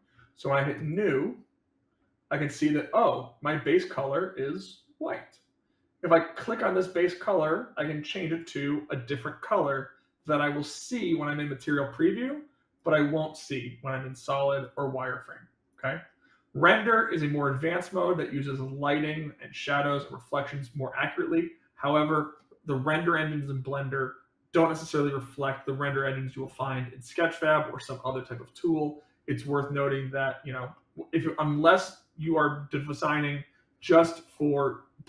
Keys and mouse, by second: 3.4 middle click, 6.3 click, 12.7 click, 14.5 click, 15.6 click, 17.5-21.3 middle drag.